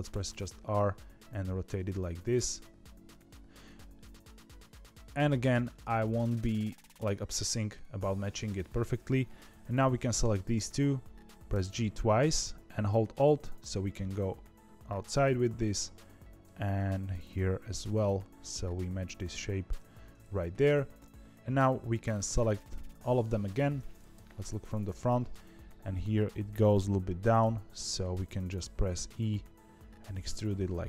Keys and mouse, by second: 0.0 r, 7.9 click, 9.6 click, 11.5 g, 15.6 click, 16.4 g, 21.9 click, 24.1 KP_1, 27.3 e.